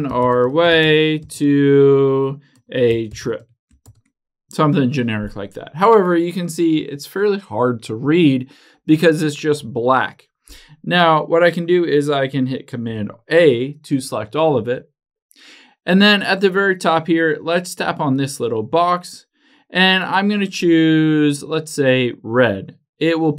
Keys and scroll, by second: 4.1 shift+1, 13.1 super+a.